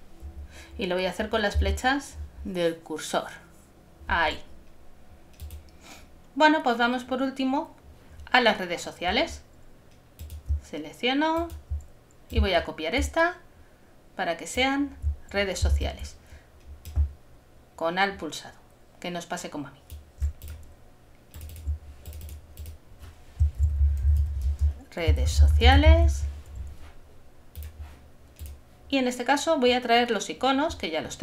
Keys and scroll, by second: 15.7 shift+super+z, 23.4-25.9 typing.